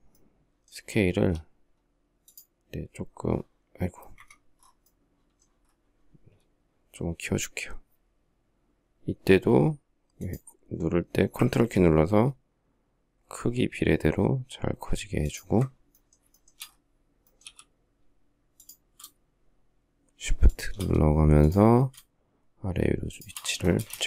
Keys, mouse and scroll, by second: 0.9 s, 3.9 Escape, 15.0 ctrl+click, 16.1 shift+middle click, 17.2 m, 20.2 shift+click, 22.9 shift+click, 23.5 space, 23.6 Escape, 23.9 space, 23.9 Escape.